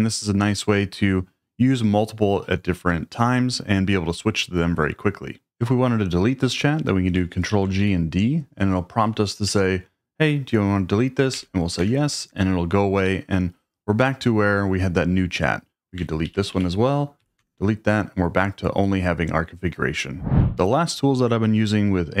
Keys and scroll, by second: 7.5 ctrl+g, 7.8 d, 11.3 y, 11.8 Return, 16.3 ctrl+g, 17.2 y, 17.4 Return.